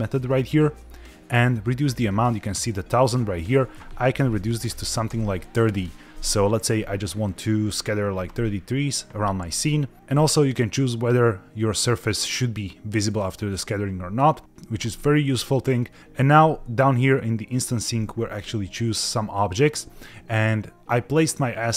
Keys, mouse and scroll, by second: 3.3-5.2 drag, 11.7 click, 13.1 click, 15.8-18.7 scroll down 3.